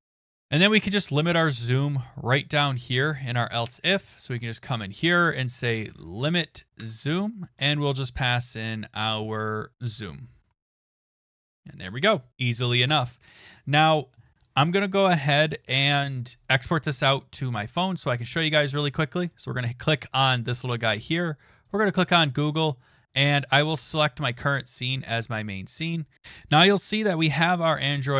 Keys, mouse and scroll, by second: 0.3 click, 0.7 click, 1.2 click, 1.6-3.9 scroll down 2, 3.9 BackSpace, 5.4-6.4 typing, 6.8 Tab, 9.5-11.3 typing, 10.8 click, 11.0 Return, 12.1 click, 12.3 ctrl+s, 12.8-14.1 scroll down 4, 16.7-17.9 scroll, 19.3 click, 21.7 click, 24.3 click, 26.2 click.